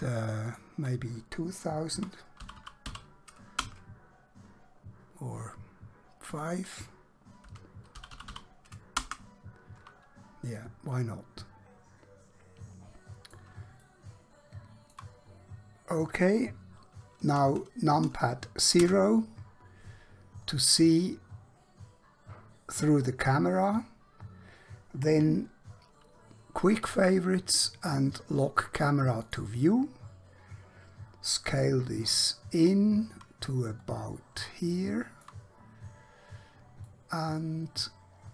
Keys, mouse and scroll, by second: 1.9-2.8 typing, 3.7 Return, 6.4 click, 7.4-8.3 typing, 9.1 Return, 11.0 middle click, 13.9 shift+middle click, 18.8 KP_0, 21.2 scroll down 1, 23.2 scroll up 1, 24.0 scroll down 1, 26.9 q, 29.3 click, 31.6 scroll down 1, 33.6 scroll up 1, 34.7 shift+middle click, 35.7 scroll down 1, 37.0 middle click.